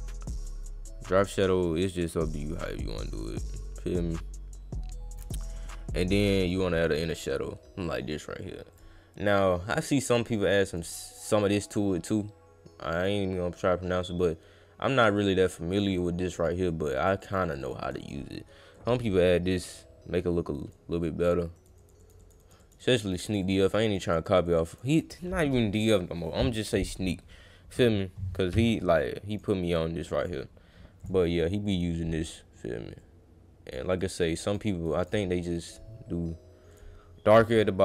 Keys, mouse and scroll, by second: 0.5 drag, 1.1 click, 2.6 click, 3.6-5.1 drag, 6.4 click, 6.7 click, 8.7 click, 10.1 click, 10.7 click, 11.8 click, 13.6-15.8 drag, 16.3 click, 16.7 click, 16.9 click, 17.2 click, 17.4 click, 17.6 click, 17.8 click, 18.0 click, 18.7-20.7 drag, 21.5 click, 21.8 click, 22.0 click, 22.2 click, 22.4 click, 22.6 click, 22.8 click, 23.0 click, 23.2 click, 23.4 click, 23.6 click, 23.8 click, 24.0 click, 24.2 click, 24.4 click, 24.6 click, 26.7 click, 29.3 click, 30.2 click, 31.0 click, 33.0 click, 34.0 click, 34.3 click, 34.7 click, 34.9 click, 35.7 click, 36.7 click, 37.4 click.